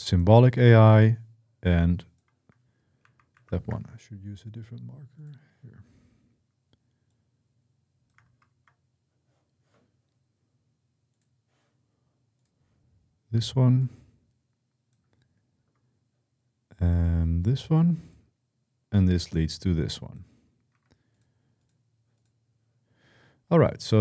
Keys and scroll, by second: 2.8 ctrl+z, 3.1 ctrl+z, 8.1 ctrl+z, 8.2 ctrl+x, 20.5 Escape.